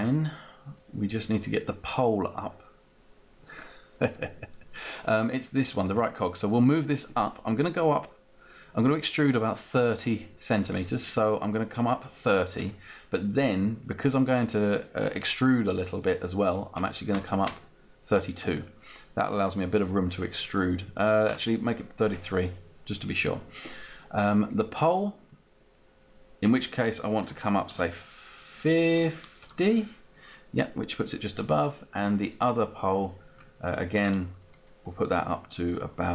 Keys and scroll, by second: 17.8 Up, 27.6 5, 28.3 0, 29.5 Return, 30.4 Return.